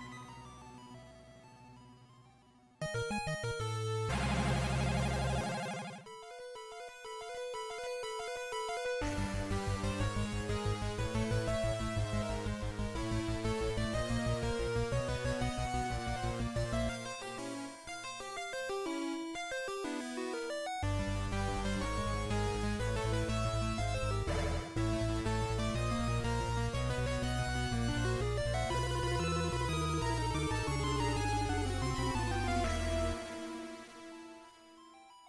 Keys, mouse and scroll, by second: 1.4 KP_0, 4.7 click, 6.5 click, 14.9-16.1 scroll up 4, 18.7 click, 23.2-24.1 scroll down 3, 27.7 click.